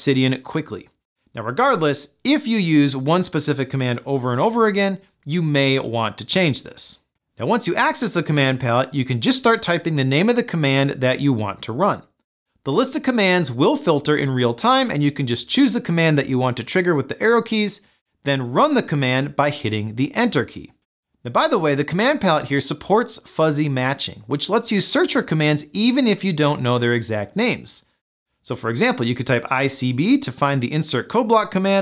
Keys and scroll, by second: 17.0 Down, 18.8 Return.